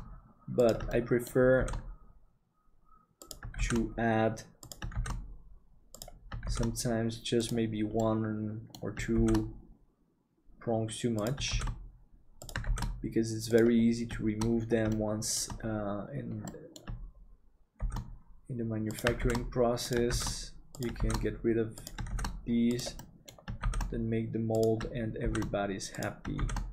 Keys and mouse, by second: 0.9 shift+middle click, 3.7 shift+d, 8.1 middle click, 15.0 shift+middle click, 16.6 middle click, 17.8 shift+d, 20.2 shift+d, 23.0 middle click.